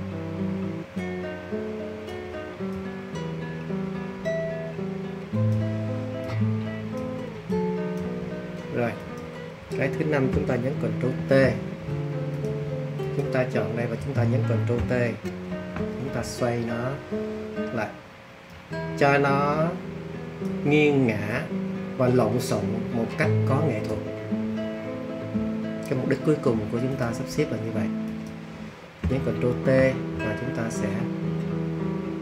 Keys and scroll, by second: 11.1 super+t, 15.4 super+t, 29.5 super+t.